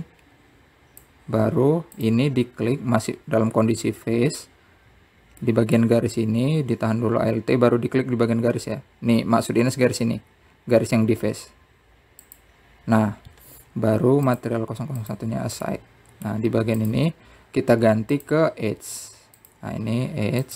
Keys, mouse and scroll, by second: 1.6 click, 3.2-3.7 scroll up 2, 3.7 click, 4.4-4.9 scroll down 1, 7.2-10.3 middle drag, 14.1 alt+click, 16.1 click, 16.7 click, 17.4-18.6 middle drag, 18.6 click, 19.9 click.